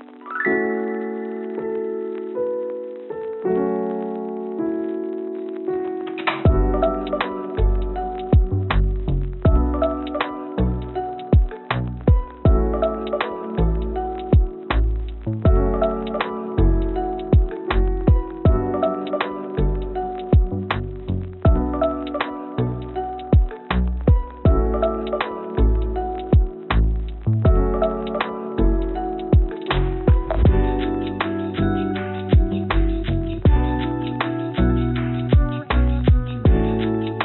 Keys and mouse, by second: 1.1 g, 8.7 shift+d, 13.3 g, 15.2 click, 15.5 click, 15.7 click, 16.9 g, 19.6 click, 21.2 g, 22.7 z, 23.4 g, 25.8 click, 26.4 g, 28.3 click, 28.8 s, 30.8 g, 34.0 click, 34.2 click, 35.1 click, 35.9 click, 36.2 click, 36.7 g.